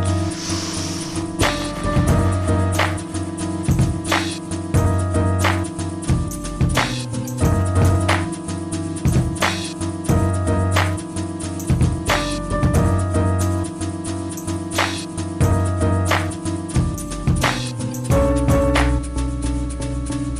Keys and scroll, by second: 0.2 shift+Escape, 1.5 space, 7.2 i, 8.0 Left, 9.6 space, 19.8 space.